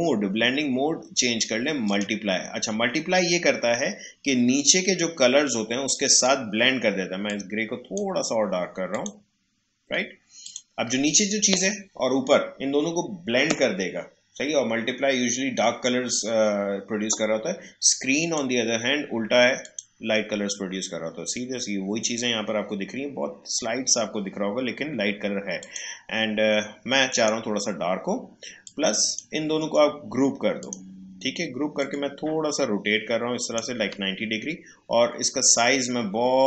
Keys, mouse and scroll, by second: 5.9-8.9 drag, 18.2 click, 25.6 click, 29.6 right click, 30.6-36.1 drag.